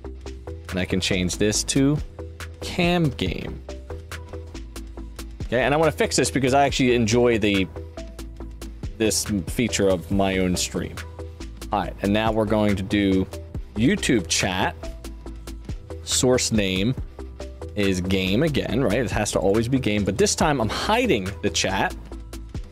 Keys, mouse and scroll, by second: 0.1 click, 1.2 click, 2.0 click, 2.0 right click, 2.8 click, 2.8 right click, 3.1-4.2 typing, 5.1 click, 5.9 click, 6.4 click, 6.7 click, 9.0 click, 10.2 scroll down 1, 12.1 click, 13.4-14.7 typing, 15.4 click, 19.3 click, 19.9 click.